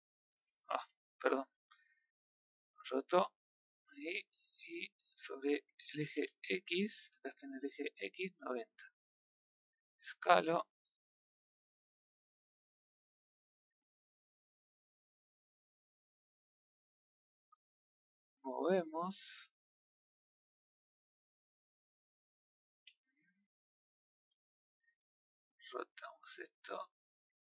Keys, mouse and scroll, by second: 2.3 click, 3.4 click, 6.1-8.2 drag, 8.2 scroll down 5, 9.7 click, 10.3 click, 11.3 click, 14.4 scroll up 1, 15.4 click, 16.6-18.1 middle drag, 18.1 click, 18.8 click, 21.1-22.8 middle drag, 23.8 scroll up 3, 24.3-24.8 middle drag, 26.3 click.